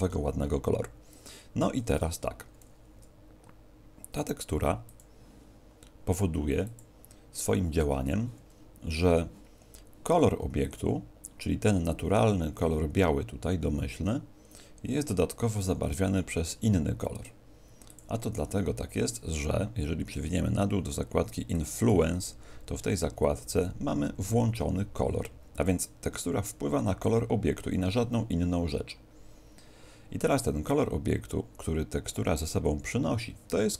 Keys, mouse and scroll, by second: 1.5 Escape, 2.5 s, 4.9 click, 6.6 click, 10.6 click, 17.8 click, 19.7-21.5 scroll down 4, 21.5 click, 21.5-21.9 scroll down 1, 22.3-23.3 scroll down 7, 23.3 scroll down 5.